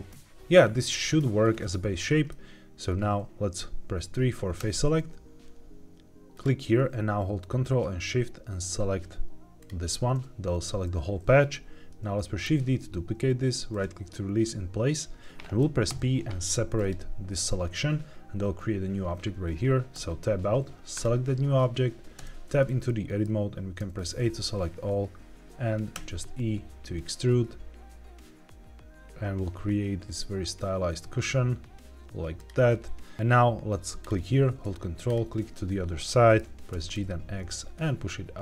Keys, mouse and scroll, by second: 0.6 scroll down 1, 2.2 middle click, 2.8-3.6 scroll down 1, 4.5 3, 6.2 click, 9.5 ctrl+shift+click, 12.4 shift+d, 13.6 right click, 15.8 p, 20.8 click, 22.1 Tab, 22.8 middle click, 23.7 a, 32.3 click, 32.6-33.1 scroll up 2, 33.1 3, 33.9 click, 35.0 ctrl+click, 35.6-35.9 scroll down 2, 35.9 middle click, 36.6 g, 36.8 x.